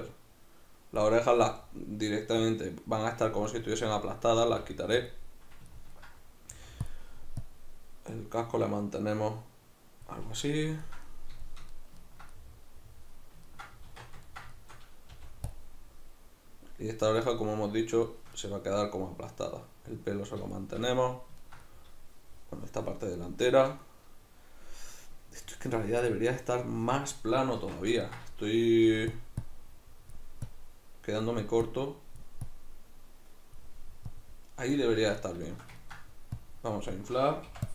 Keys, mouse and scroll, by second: 3.5-5.1 ctrl+middle drag, 4.4 f, 5.1 click, 5.7-6.9 ctrl+middle drag, 6.5 f, 6.9 click, 10.4-15.6 middle drag, 13.9 alt+q, 15.2 f, 15.6 click, 18.0-29.2 shift+middle drag, 27.6 alt+q, 28.8 f, 29.2 click, 35.0 alt+q, 35.0 click, 35.5 ctrl+shift+middle click, 36.4-37.7 drag, 37.5 i.